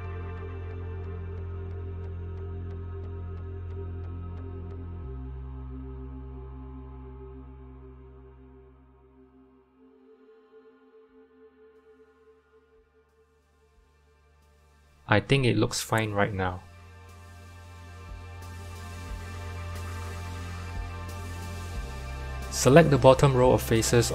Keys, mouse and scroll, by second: 1.6 Tab, 2.4 a, 3.2 s, 9.4-10.2 scroll down 10, 10.6 click, 11.6 g, 16.5 scroll up 2, 18.4-19.8 scroll down 1, 19.8-20.2 scroll up 1, 20.2 shift+middle click, 20.6-22.0 scroll up 1, 22.0 3, 22.6 click.